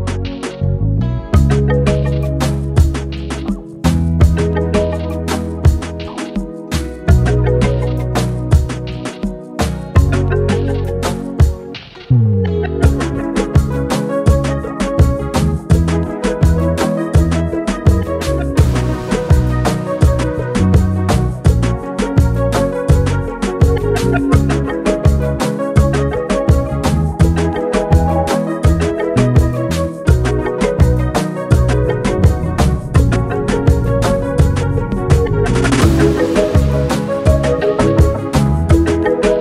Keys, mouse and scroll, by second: 1.0 click, 3.4-5.1 drag, 12.9 right click, 14.1 click, 14.9-21.3 drag, 24.1 ctrl+z, 24.5-25.8 drag, 34.5 Return, 35.4 click, 38.4 typing, 38.7-39.4 drag.